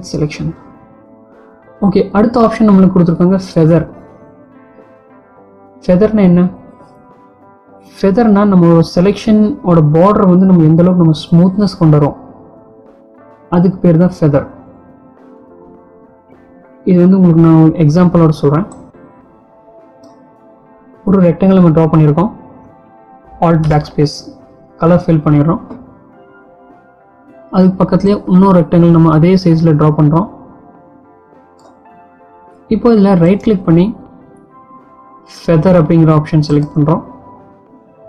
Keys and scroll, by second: 23.4 alt+BackSpace.